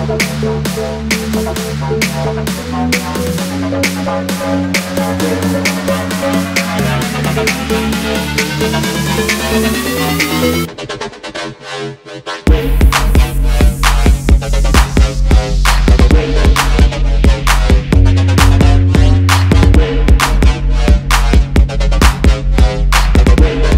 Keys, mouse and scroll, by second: 0.3-0.7 typing, 0.8 double click, 1.1 alt+scroll up 1, 1.9 alt+scroll down 1, 2.4-3.4 typing, 3.1 double click, 3.2 double click, 3.7 alt+scroll down 1, 3.9 alt+scroll up 1, 5.0 double click, 5.7 alt+scroll up 1, 6.0 alt+scroll down 1, 7.4-7.7 alt+scroll down 1, 7.7 alt+scroll up 1, 8.0 space, 8.5 i, 11.4 alt+scroll up 1, 13.5 alt+scroll up 2, 14.0 alt+scroll up 1, 14.5 shift+click, 15.2 shift+click, 15.3 alt+scroll down 2, 16.1 right click, 17.3 alt+scroll down 1, 17.8 alt+scroll up 1, 18.5 double click, 18.6 alt+scroll up 1, 21.9 alt+scroll down 1, 22.6 typing.